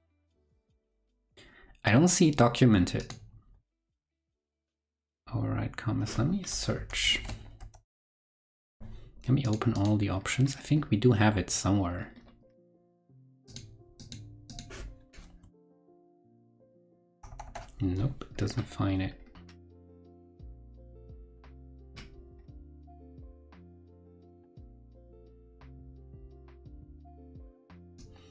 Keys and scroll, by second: 6.9 super+f, 7.1 super+v, 15.6 super+f, 16.2 super+v.